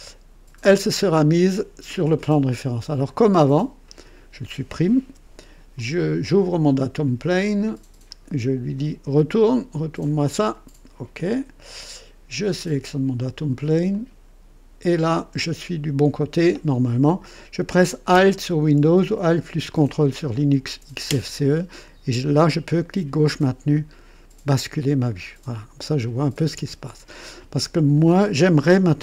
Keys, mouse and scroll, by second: 0.5 scroll up 1, 1.1-1.6 right drag, 3.0 click, 5.0 Delete, 5.7 click, 7.4-8.2 drag, 8.7 click, 10.0-10.7 drag, 11.2 click, 12.5 click, 13.8 click, 15.0-15.4 scroll up 1, 15.6-16.4 right drag, 22.7-26.7 ctrl+alt+drag.